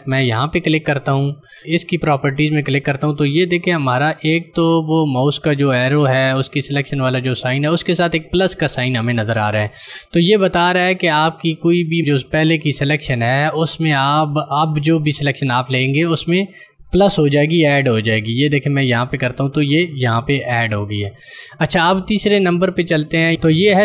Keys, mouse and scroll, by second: 17.2 click.